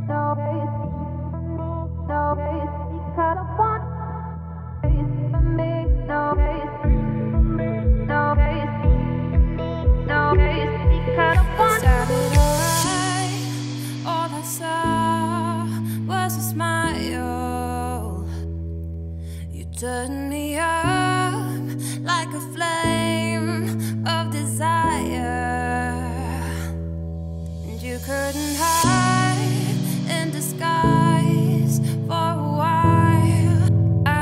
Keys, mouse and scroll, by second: 0.0 click, 0.5 scroll down 2, 0.9-1.4 scroll up 5, 1.4-4.4 shift+middle drag, 4.7-5.6 shift+middle drag, 5.6 Tab, 5.8 click, 6.1 2, 6.2 click, 6.7-7.1 scroll down 3, 7.1 shift+d, 8.3 p, 8.8 Tab, 9.1 click, 9.3 Tab, 9.6 1, 10.3 click, 10.8 `, 11.5 scroll down 3, 11.7 z, 12.1 scroll up 2, 12.4 g, 17.5-19.6 drag, 19.6-20.4 scroll up 1, 20.4 g, 23.7 scroll down 4, 23.9 middle click, 24.3 a, 24.7 `, 25.2 z, 25.7-26.5 scroll up 5, 26.5-27.0 scroll up 3, 27.0-27.7 scroll down 7, 27.7 click, 27.8 Tab, 28.3 click, 28.6 Tab, 28.9 1, 29.5 z, 30.1 click, 30.3 z, 31.3 z, 31.7 middle click, 32.1-32.5 scroll up 2, 32.5 middle click, 32.7 scroll up 2, 32.9 g.